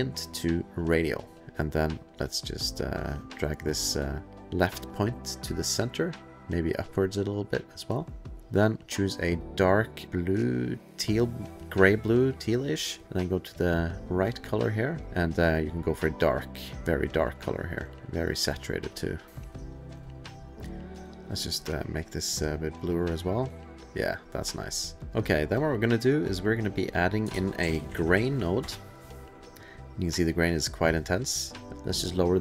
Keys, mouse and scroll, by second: 0.8 click, 1.3 click, 1.4 ctrl+f, 1.4 ctrl+click, 1.5 click, 1.7 middle click, 2.8 middle click, 6.4 click, 7.0 click, 8.4 click, 8.9 click, 9.4 click, 10.0 click, 11.8 click, 13.5 click, 14.9 click, 15.9 click, 18.9 click, 19.0 click, 19.2 click, 19.2 click, 19.2 scroll, 19.5 click, 20.9 click, 24.7 click, 24.9 click, 25.0 click, 25.1 click, 25.5 click, 26.0 middle click, 26.2-26.8 scroll, 26.8 click, 27.6-28.6 typing, 30.1 click, 32.3 click.